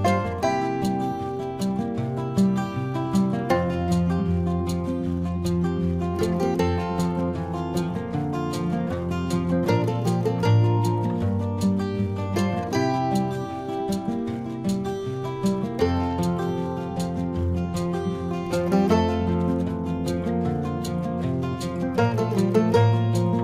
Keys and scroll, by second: 0.8 ctrl+=, 1.0 ctrl+=, 1.4 ctrl+=, 1.5 space, 2.1 space, 2.3 ctrl+-, 2.4 space, 5.1 ctrl+-, 6.3 ], 6.3 space, 6.5 ctrl+-, 6.7 space, 6.8 ctrl+-, 6.9 ], 7.9 ], 8.7 space, 9.7 space, 10.2 space, 10.9 ctrl+-, 11.7-14.4 typing, 12.8 ctrl+=, 16.0 space, 18.6 ctrl+alt+z, 19.0 space, 20.9 space, 21.2 ctrl+-, 21.4 ctrl+-, 21.6 space, 21.7 ctrl+-, 21.9 ctrl+alt+z, 22.5 ctrl+alt+z, 22.6 space, 23.0 space.